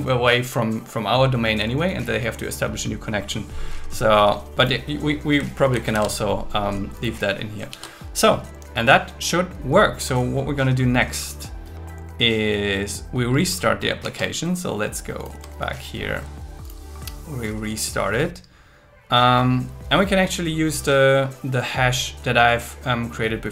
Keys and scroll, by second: 5.6 super+Right, 5.9 shift+super+Left, 7.7 super+s.